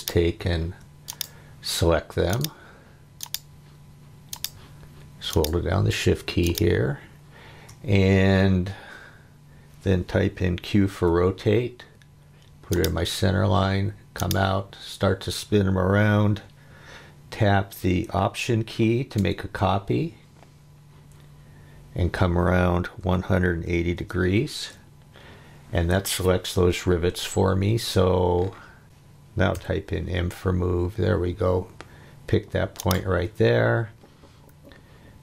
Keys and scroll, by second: 10.9 q, 23.0 1, 23.5 8, 23.9 0, 24.6 Return, 28.8 space, 29.5 m.